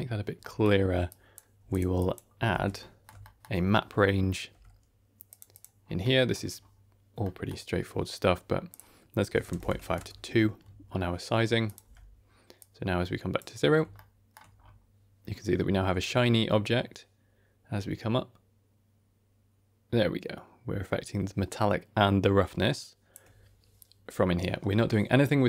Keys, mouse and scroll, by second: 0.3 middle click, 0.6-1.0 scroll down 2, 1.0 click, 1.5 g, 1.9 click, 2.4 ctrl+x, 2.7 middle click, 3.0 scroll down 1, 3.1 ctrl+middle click, 4.4 q, 5.7 scroll up 3, 5.9 middle click, 6.5-7.1 scroll up 1, 7.1 middle click, 8.6-9.9 drag, 11.6 click, 11.7 Tab, 12.5 click, 13.6 scroll up 2, 13.9 shift+middle click, 14.3 shift+scroll down 1, 14.5-14.8 scroll up 2, 15.9 shift+click, 16.7 shift+click, 16.8 shift+middle click, 19.3 shift+click, 19.5-23.1 shift+drag, 24.0-25.4 scroll down 2.